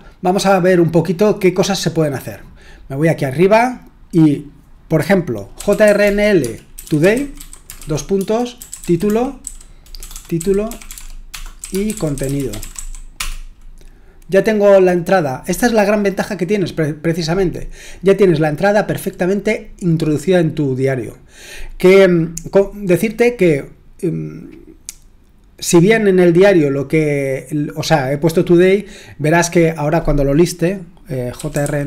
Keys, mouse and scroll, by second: 0.0-0.8 scroll up 1, 0.8-3.3 scroll up 1, 3.3-5.5 scroll down 1, 5.3-13.2 typing, 31.1-31.8 typing.